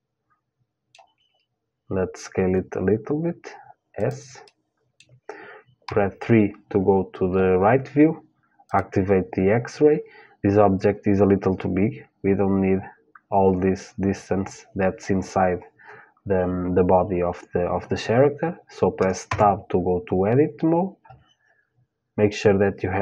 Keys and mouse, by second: 2.0 s, 4.1-6.2 middle drag, 5.5 KP_3, 8.3-10.3 drag, 18.9 Tab, 22.6-23.0 drag.